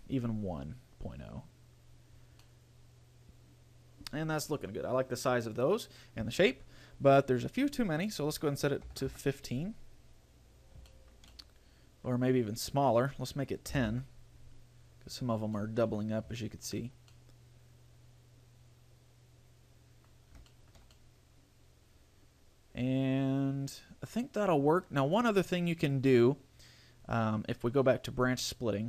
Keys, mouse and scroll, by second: 1.9-2.7 scroll down 5, 2.7 middle click, 5.7-6.4 scroll up 5, 8.2 click, 10.7-11.1 scroll down 5, 11.1 shift+middle click, 11.5 middle click, 13.1 click, 15.5-15.9 scroll up 2, 15.7 middle click, 16.6 shift+middle click, 17.3 middle click, 20.3-20.7 scroll down 2, 20.7 shift+middle click, 21.1 middle click, 26.0 click.